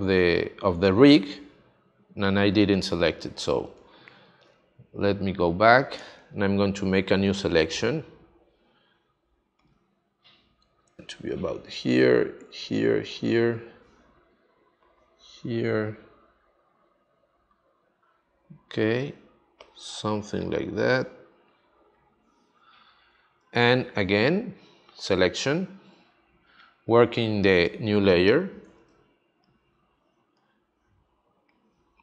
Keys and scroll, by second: 3.6 space, 28.8 space.